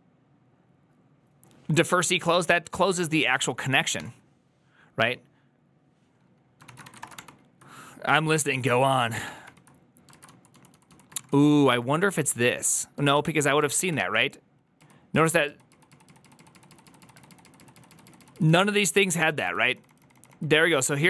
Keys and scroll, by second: 2.3 ctrl+c, 2.3 ctrl+u, 2.5-4.3 typing, 6.5-8.7 typing, 9.1 ctrl+c, 9.3 ctrl+d, 9.9-11.6 typing, 12.9 ctrl+a, 13.1 2, 13.6 ctrl+a, 13.9 [, 14.7 ctrl+u, 15.0 ctrl+u, 15.6 ctrl+u, 15.8 ctrl+u, 15.9 ctrl+u, 16.2 ctrl+u, 16.6 ctrl+u, 16.9 ctrl+u, 19.1 ctrl+u, 19.5 ctrl+u, 19.5 ctrl+d, 19.6 ctrl+d, 19.8 ctrl+d, 20.3 ctrl+d.